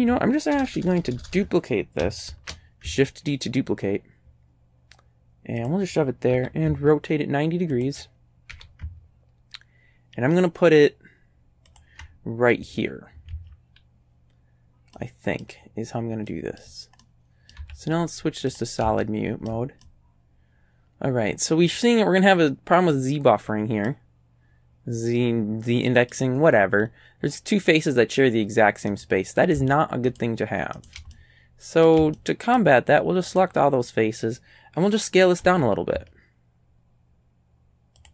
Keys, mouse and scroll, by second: 0.5 ctrl+KP_Add, 0.7 ctrl+KP_Add, 2.3 shift+d, 5.6 ctrl+click, 6.3 r, 7.8 ctrl+click, 8.5 g, 11.7 ctrl+click, 13.4 a, 15.0 right click, 16.3 right click, 17.0 right click, 17.6 z, 18.5 click, 19.0-22.0 shift+drag, 23.0 click, 23.3 right click, 25.2-26.2 right drag, 26.2 middle click, 26.4-27.0 scroll up 1, 28.9 right click, 30.1 shift+right click, 30.8 shift+right click, 31.1 shift+middle click, 32.2 shift+middle click, 33.3 shift+right click, 35.5 s, 38.0 ctrl+click.